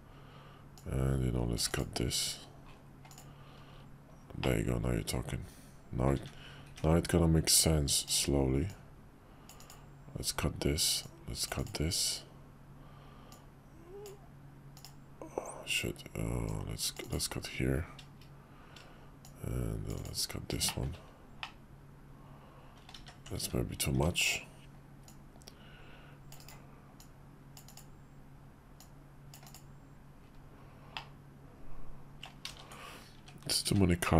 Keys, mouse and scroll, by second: 0.7-1.8 drag, 3.1 click, 4.4-6.1 middle drag, 6.6 `, 8.0 click, 8.7-9.8 drag, 11.0-11.7 drag, 13.3-14.9 drag, 16.5-17.2 drag, 19.2-20.1 drag, 20.6 shift+middle drag, 21.4-22.9 middle drag, 23.0 ctrl+z, 23.4 `, 23.9 `, 25.1-26.6 drag, 27.0-27.8 drag, 28.8-29.6 drag, 30.9-32.2 middle drag, 32.5 ctrl+z, 33.1 `, 33.7 `.